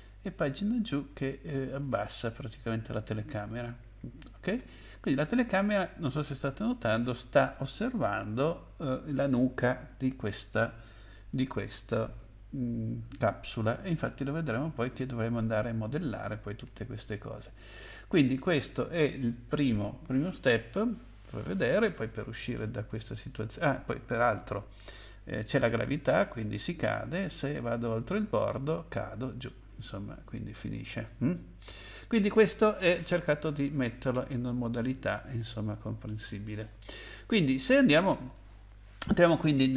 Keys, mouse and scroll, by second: 0.0 Page_Down, 0.1 Page_Down, 0.2 Page_Down, 2.7 Page_Down, 3.0 Page_Down, 3.4 Page_Up, 3.6 Page_Up, 3.8 Page_Up, 4.0 Page_Up, 4.2 Page_Up, 4.4 Page_Up, 4.6 Page_Up, 4.8 Page_Up, 6.9 Page_Up, 7.4 Page_Up, 8.2 Page_Down, 8.7 Page_Down, 8.8 Page_Down, 14.8 Left, 15.4 Right, 16.9 Right, 17.3 Right, 17.3 Right, 17.6 Left, 18.1 Left, 18.1 Left, 18.3 Left, 20.4 Right, 21.2 Left, 24.6 Right, 25.5 space, 26.6 Right, 27.1 Right, 27.2 Right, 27.3 Right, 27.6 Up, 28.1 Up, 28.2 Up, 28.3 Up, 31.8 click, 33.7-34.1 scroll down 3, 34.4 middle click.